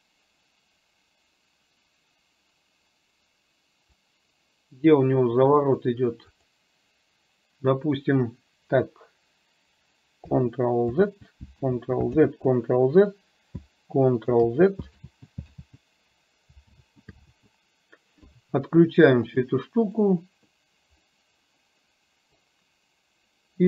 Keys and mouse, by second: 5.7 click, 6.5 click, 11.0 ctrl+z, 12.2 ctrl+z, 15.1 ctrl+z, 17.4 ctrl+z, 19.5 click, 20.0 click, 21.1-22.5 middle drag.